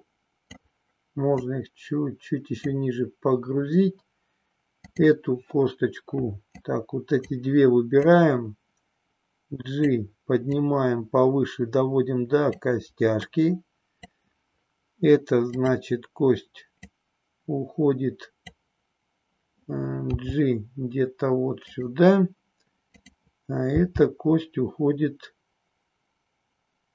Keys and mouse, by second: 1.4-2.7 drag, 4.7 click, 6.4 click, 8.0-9.9 drag, 10.6-12.6 drag, 13.3 click, 16.8-18.4 drag, 19.9 g, 21.7 click, 22.8 click, 23.5 g.